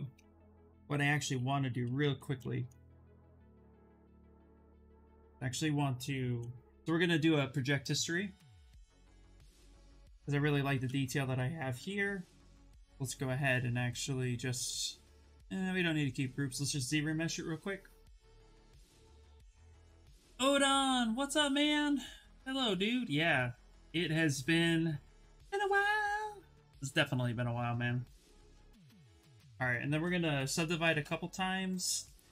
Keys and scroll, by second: 1.5 shift+f, 3.7 shift+d, 9.6 shift+f, 12.5 2, 30.0 shift+f, 30.5 ctrl+d.